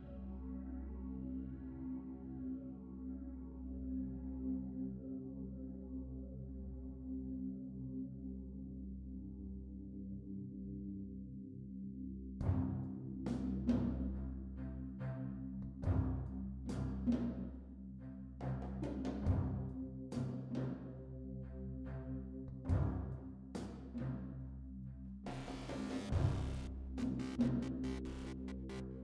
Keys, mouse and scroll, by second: 0.4 click, 0.4 shift+middle click, 0.4-1.0 scroll down 3, 0.6 middle click, 0.6-1.0 scroll up 1, 1.0 ctrl+right click, 1.2 g, 2.5-3.2 scroll down 2, 2.6 middle click, 3.2 right click, 3.2-4.3 scroll down 1, 4.4-5.0 scroll down 1, 5.0 right click, 5.0 click, 5.0 g, 7.7 scroll down 2, 7.9 shift+middle click, 7.9 scroll up 2, 8.6 ctrl+right click, 8.8 g, 9.0 click, 9.2 right click, 12.2-13.6 shift+middle drag, 13.6 ctrl+z, 13.6-14.6 scroll down 1, 14.6 shift+middle click, 14.6-16.6 scroll up 1, 14.6 2, 16.6 shift+right click, 16.6 f, 18.6 g, 19.1 right click, 19.3 click, 19.6 shift+middle click, 19.9 right click, 19.9 g, 21.5 click, 21.5 scroll down 1, 21.7 middle click, 23.6 right click, 23.6 g, 23.8 click, 24.1 scroll down 2, 24.1 a, 24.4 Tab, 24.4 right click, 24.5 right click, 24.7 shift+middle click, 24.7-25.6 scroll down 1, 25.6 right click, 25.7 z, 26.7 ctrl+right click, 27.7 shift+middle click, 27.7-29.0 scroll up 3.